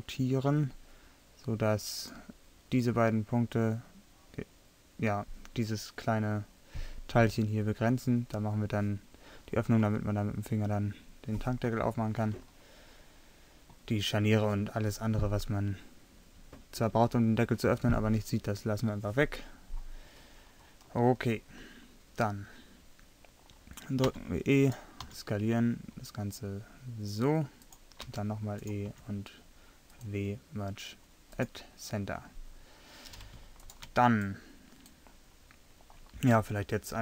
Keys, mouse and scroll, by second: 12.4 middle click, 21.4-23.4 middle drag, 24.1 e, 25.1 s, 28.1 e, 28.6 click, 29.0 w, 32.7-34.6 middle drag.